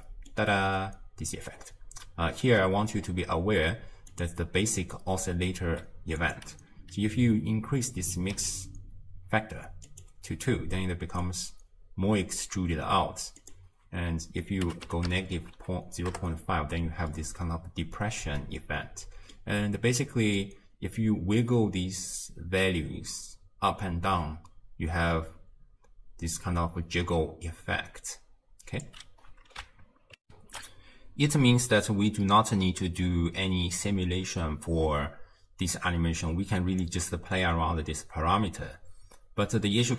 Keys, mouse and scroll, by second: 4.1 click, 10.6-16.2 middle drag, 16.2-17.2 drag, 17.2-20.6 middle drag, 20.6-23.5 drag, 30.3 ctrl+alt+shift+q, 36.8-39.9 drag.